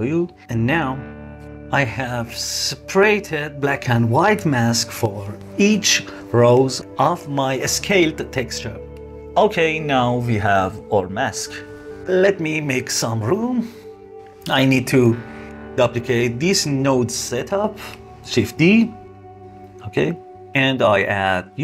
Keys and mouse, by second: 1.5 ctrl+shift+click, 9.9 middle click, 11.4 click, 12.2-12.7 drag, 12.9-14.4 drag, 14.5 click, 15.0-15.7 drag, 18.1 shift+d, 19.4 click, 19.8 click, 20.8 click.